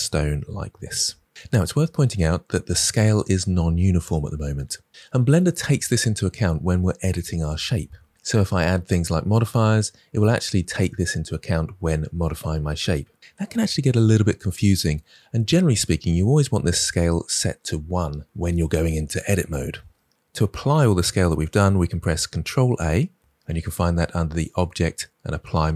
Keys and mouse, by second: 22.7 ctrl+a, 24.4-25.7 drag.